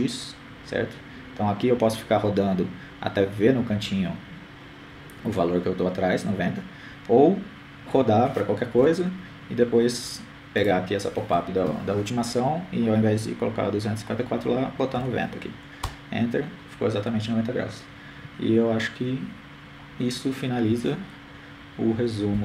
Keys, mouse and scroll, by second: 10.6-12.0 drag.